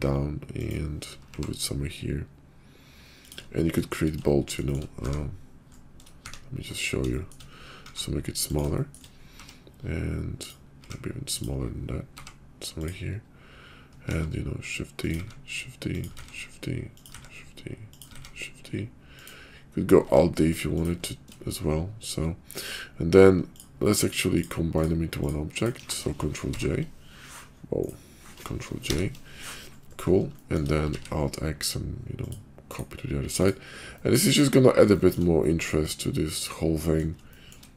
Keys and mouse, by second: 1.2 g, 4.3 middle click, 4.7 shift+middle click, 5.0 `, 6.2 `, 7.1 shift+click, 7.8 s, 8.7 shift+middle click, 9.3 g, 10.8 s, 12.0 g, 14.1 shift+d, 15.2 shift+d, 16.2 shift+d, 17.1 shift+d, 18.1 shift+d, 20.0 shift+d, 24.6 shift+click, 25.4 shift+click, 26.4 ctrl+j, 26.4 ctrl+k, 28.7 ctrl+j, 30.3 shift+click, 30.8 alt+x, 32.2 click, 32.7-33.2 drag, 33.4 click, 33.9 middle drag, 34.3 KP_5, 35.4-37.0 middle drag, 37.3 shift+middle click.